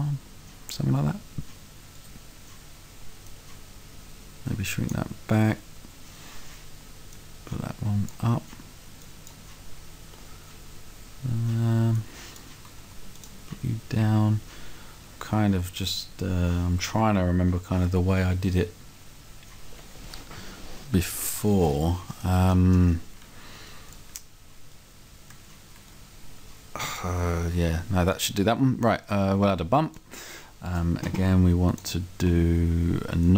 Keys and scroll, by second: 25.7 Right, 28.5 Right.